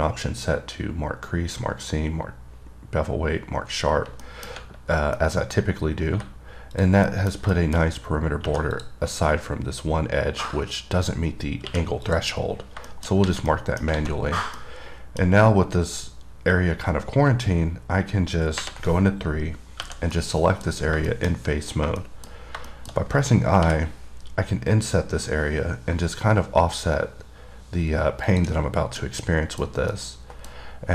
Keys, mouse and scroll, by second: 4.5 middle click, 4.8-5.4 scroll up 2, 5.4 middle click, 7.0 click, 7.3 middle click, 7.8 middle click, 8.0 scroll up 1, 9.0 click, 12.2 click, 12.8 scroll down 2, 13.1 middle click, 13.7 middle click, 14.5 scroll down 1, 14.8 middle click, 20.4 middle click, 20.9 scroll up 2, 21.3 middle click, 21.5-22.1 scroll up 4, 22.2 middle click, 22.5 scroll up 1, 22.9 middle click, 28.5 click, 28.8 scroll down 3, 29.3 middle click, 29.8 scroll down 1, 30.1 middle click.